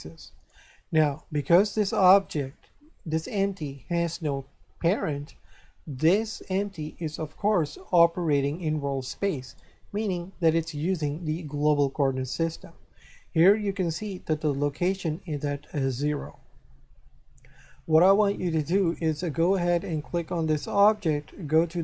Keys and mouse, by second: 2.1 right click, 19.3 right click.